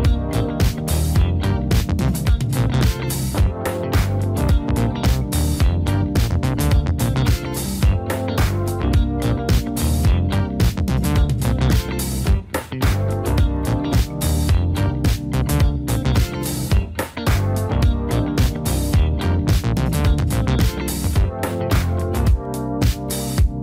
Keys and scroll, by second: 0.1 Down, 0.3 Down, 0.5 Down, 0.7 Up, 1.3 Up.